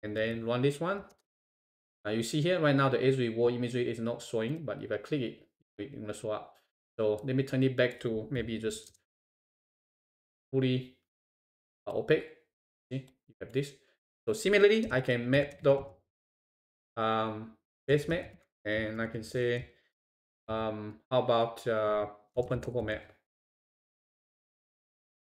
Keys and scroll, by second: 1.1 shift+Return, 8.9 shift+Return.